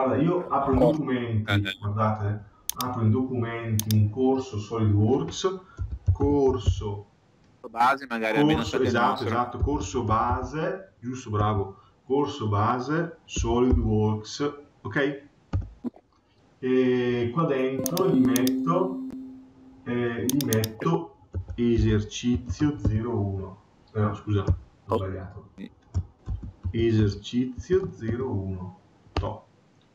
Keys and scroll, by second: 15.3 Return, 24.3 BackSpace, 26.0 Caps_Lock, 29.0 Return.